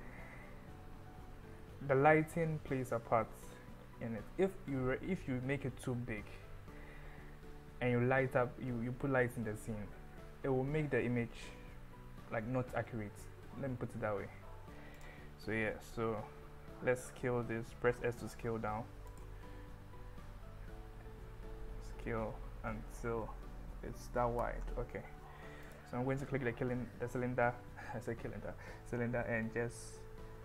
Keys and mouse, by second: 15.0 click, 16.5 s, 19.1 click, 20.7 s, 24.4 click, 25.7 click, 26.7 s, 26.9 z.